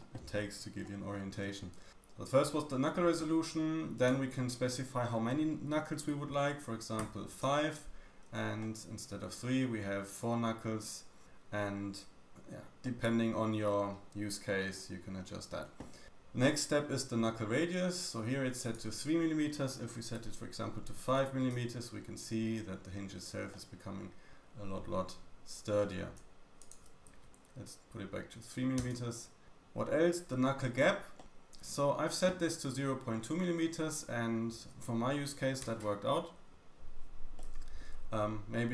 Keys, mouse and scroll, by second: 0.3-1.1 scroll down 3, 1.1-1.8 scroll up 3, 3.9-12.2 drag, 8.6 middle click, 12.2-13.3 shift+middle drag, 12.2-12.6 scroll down 2, 15.0 scroll down 2, 18.6 click, 22.9-23.5 scroll down 2, 23.5 middle click, 26.6 click, 31.2 middle click, 31.2-31.7 scroll up 1, 33.8 middle click, 37.4 middle click, 37.9-38.2 scroll up 2.